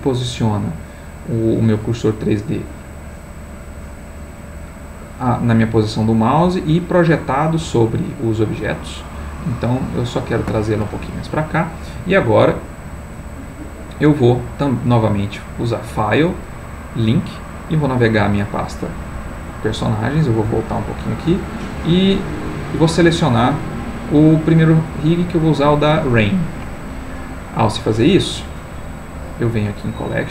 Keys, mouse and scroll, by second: 0.1 shift+right click, 0.7 shift+right click, 1.2 shift+right click, 1.6 shift+right click, 2.1 shift+right click, 2.7 shift+right click, 3.5 shift+right click, 4.2 shift+right click, 4.9 shift+right click, 5.3 shift+right click, 6.0 shift+right click, 6.7 shift+right click, 7.4 shift+right click, 8.4 shift+right click, 11.2 middle click, 12.2-13.7 middle drag, 15.0 click, 17.3 click, 18.7 click, 19.9 click, 20.5 click, 21.4 click, 22.4 click, 23.3 click, 25.0 click, 26.2 click, 27.5 click, 29.6 click.